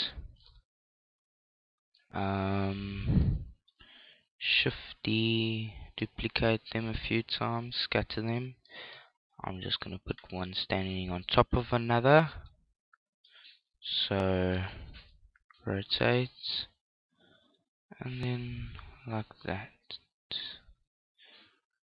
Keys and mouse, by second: 0.6 KP_7, 1.8 middle click, 2.0 z, 2.4 middle click, 3.1-5.0 middle drag, 4.2 shift+d, 5.4 shift+d, 5.5-11.4 drag, 7.0 shift+d, 7.4 shift+d, 8.5 shift+d, 9.9 middle click, 11.7-13.4 middle drag, 13.4 KP_3, 14.1 KP_3, 15.1 middle click, 15.2 r, 17.1 click, 18.8 g.